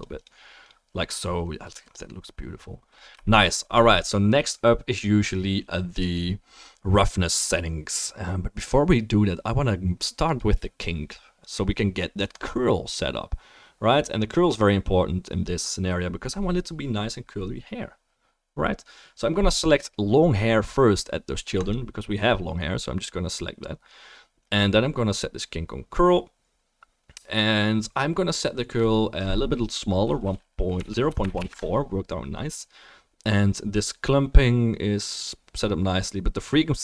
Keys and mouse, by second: 21.8-28.7 drag.